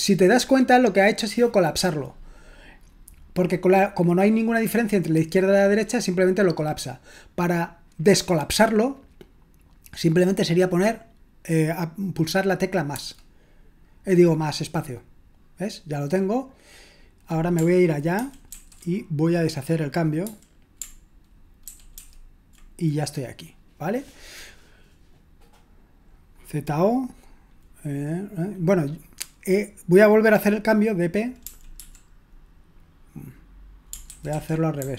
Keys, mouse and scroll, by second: 18.2 ctrl+w, 18.5 ctrl+w, 20.2 u, 21.7 ctrl+w, 21.9 ctrl+w, 31.2-32.3 typing, 34.1 ctrl+w, 34.3 ctrl+w, 34.8 u.